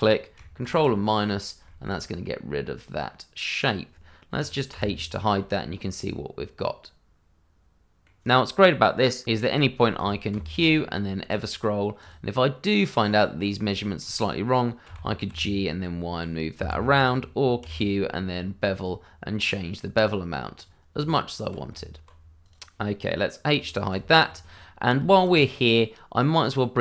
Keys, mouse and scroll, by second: 0.6 ctrl+KP_Subtract, 1.6 shift+middle click, 1.9-3.3 shift+scroll up 1, 3.3-3.9 scroll up 1, 4.4 click, 4.7 h, 5.3 middle click, 9.4 shift+middle click, 9.9 click, 10.3 q, 11.3 click, 12.7 middle click, 13.8 shift+middle click, 13.9 middle click, 13.9 shift+middle click, 14.8 g, 15.2 y, 16.5 Escape, 17.6 q, 18.7 click, 21.0 Tab, 22.4 click, 23.9 h, 24.2-24.5 scroll down 1, 24.5 middle click, 25.0 shift+middle click, 25.1 middle click, 25.3-25.7 scroll up 1, 25.7 middle click.